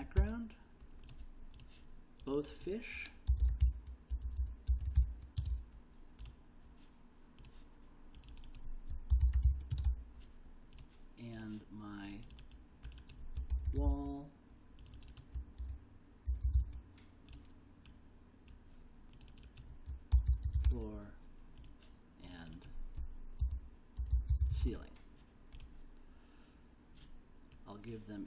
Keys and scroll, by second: 0.0-0.7 typing, 3.0-5.5 typing, 8.8-10.3 typing, 13.2-14.2 typing, 15.6-16.9 typing, 19.9-21.1 typing, 23.3-25.1 typing.